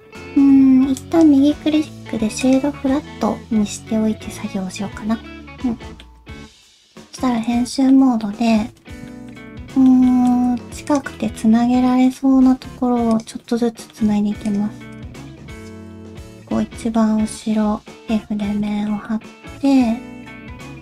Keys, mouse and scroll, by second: 0.9 right click, 2.9 middle click, 6.3 shift+middle click, 6.4 Tab, 6.4 middle click, 6.4 scroll up 2, 6.6 scroll down 2, 6.8 middle click, 7.4 middle click, 7.9 scroll up 1, 8.2 middle click, 8.6 2, 9.1 shift+middle click, 9.5 middle click, 10.1 shift+middle click, 10.5 1, 10.9 click, 11.1 middle click, 11.9 middle click, 12.3 g, 13.4 middle click, 14.4 shift+click, 14.9 shift+click, 15.6 shift+click, 15.9 middle click, 17.6 f, 17.9 middle click, 18.7 shift+middle click, 19.1 middle click.